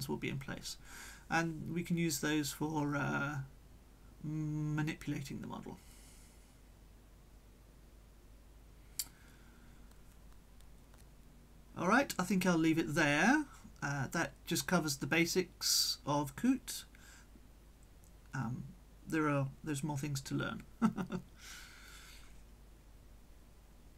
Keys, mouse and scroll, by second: 1.1-1.9 scroll down 2, 2.2 scroll down 2, 3.5-5.0 drag, 5.2 right click, 7.1 middle click, 8.1 click, 9.5 middle click, 10.8 click, 11.8-13.3 drag, 11.8-13.3 right drag, 14.9-16.2 drag, 16.2 right click, 16.6-17.7 middle drag, 20.1 click, 20.8 click.